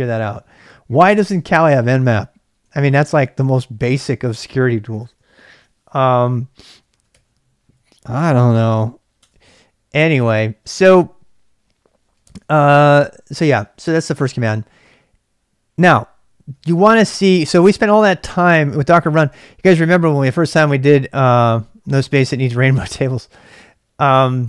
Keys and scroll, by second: 2.4-5.2 typing, 6.6-7.7 typing, 9.2 Return, 10.4-14.8 typing, 19.4 ctrl+[, 19.5 k, 21.6 ctrl+c, 22.1 ctrl+[, 22.3 k.